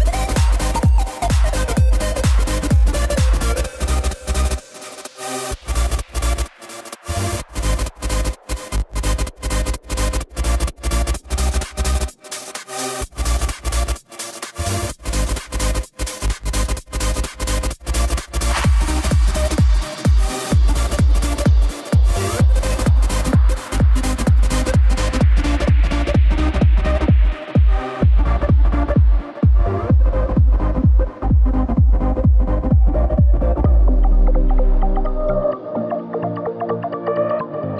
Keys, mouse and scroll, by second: 1.1 KP_1, 2.3 click, 2.7 shift+a, 16.6 scroll down 2, 16.8 shift+a, 19.4 click, 19.6 scroll up 1, 19.9 Tab, 20.4 z, 20.9-21.5 drag, 21.5 b, 23.6 click, 24.3 b, 25.7 e, 30.2 Tab, 30.5 z, 31.0 click, 31.5-34.1 middle drag, 35.9 KP_1, 36.5 shift+middle click, 36.9-37.2 scroll up 1, 37.2 Tab, 37.6 click.